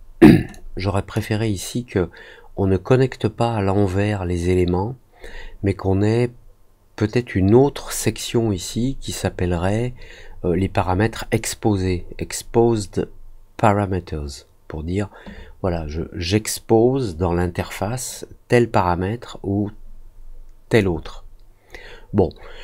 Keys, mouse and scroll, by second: 0.5 click, 20.7-22.6 drag.